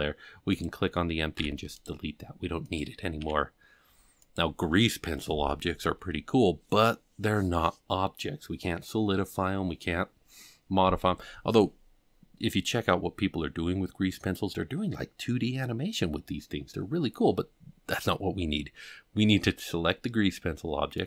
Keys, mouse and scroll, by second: 0.5 click, 1.3 x, 2.6 click, 3.2 g, 20.9-21.0 drag.